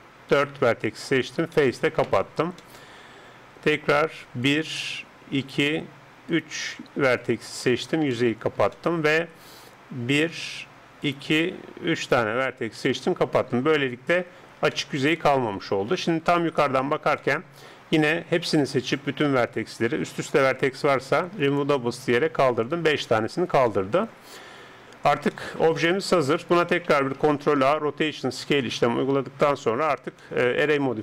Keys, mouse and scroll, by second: 1.2 right click, 1.2 f, 1.5 middle click, 1.9 right click, 3.2-4.5 middle drag, 4.5-7.9 right drag, 7.2 f, 7.7-10.6 middle drag, 10.1-13.7 right drag, 12.8 f, 13.4-14.4 middle drag, 16.4 KP_7, 18.6 a, 18.8 a, 21.5-23.7 drag, 24.7 Tab, 27.3 ctrl+a, 29.1 KP_7, 29.9 middle click, 30.3-31.0 middle drag.